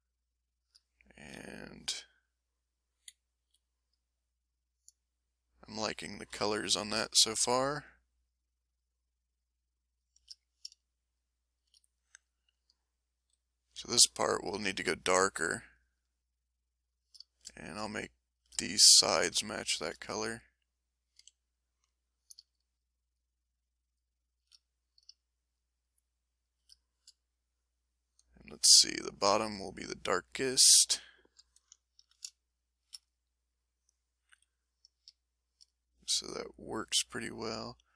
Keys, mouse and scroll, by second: 1.3 m, 1.6-2.8 middle drag, 3.1 z, 3.4 z, 3.4 z, 3.9 middle click, 3.9 z, 4.6-6.0 drag, 6.0 middle click, 6.3 m, 6.8-7.8 drag, 8.2 shift+middle click, 8.7 shift+middle click, 9.3 shift+middle click, 9.9 shift+middle click, 10.3 shift+click, 11.0 shift+middle click, 11.5 shift+click, 13.3 s, 13.6 s, 13.7 s, 14.6 click, 14.6 s, 15.8 click, 16.3 middle click, 21.2 a, 22.5 shift+click, 23.1 shift+click, 23.9 shift+click, 24.3 shift+click, 25.5 shift+click, 26.4 shift+click, 26.9 shift+middle click, 28.6-29.6 drag, 29.8 click, 30.3-31.6 middle drag, 31.7 ctrl+middle click, 32.5 ctrl+shift+click, 33.6 ctrl+shift+middle click, 34.3 ctrl+shift+m, 34.7 ctrl+shift+middle click, 35.2 ctrl+shift+click, 35.3-37.9 ctrl+shift+middle drag.